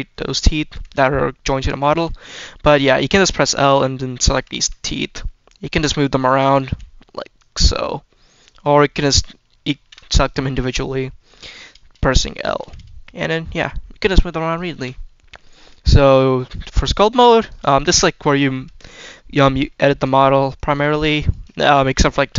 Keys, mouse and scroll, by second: 0.6 click, 1.5 click, 1.8 click, 2.2-2.7 scroll down 2, 2.7-3.5 scroll up 1, 3.5 click, 4.2 click, 4.5 click, 4.9 middle click, 5.6 click, 5.8 scroll down 1, 6.1 middle click, 6.6 g, 7.3 click, 9.6 ctrl+z, 10.0 click, 12.2 click, 12.5 l, 13.0-14.4 drag, 14.6 ctrl+z, 14.7-15.3 scroll down 2, 15.1 middle click, 15.6 shift+middle click, 16.5-17.4 drag, 17.6 shift+middle click, 18.0 scroll up 1, 18.8-19.5 scroll up 2, 19.6 shift+middle click, 20.4 drag, 21.1 click, 21.5 shift+middle click, 22.0 shift+middle click.